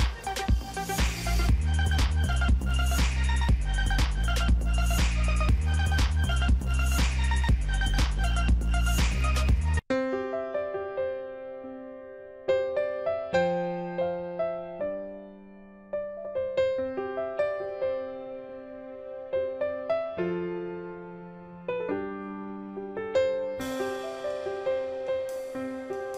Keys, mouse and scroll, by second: 15.8-19.0 typing, 21.3 ctrl+a, 24.8 ctrl+d.